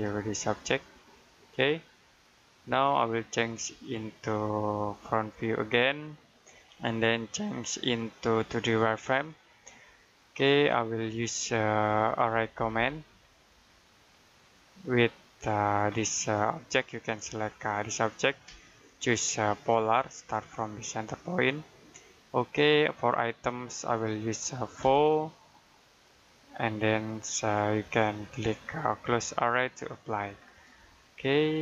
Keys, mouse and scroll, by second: 0.1 shift+middle click, 3.4 click, 10.2-12.2 scroll up 1, 11.9-13.1 typing, 14.4 click, 15.8-17.4 scroll up 1, 17.4 click, 19.7 click, 24.7 4, 25.8 click, 30.3 scroll down 1, 30.7 middle click.